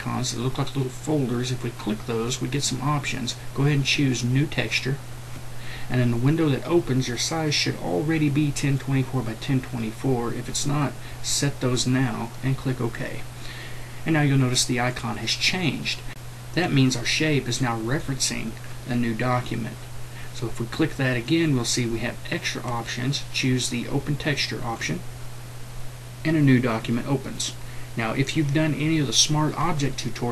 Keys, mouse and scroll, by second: 5.1-30.3 drag.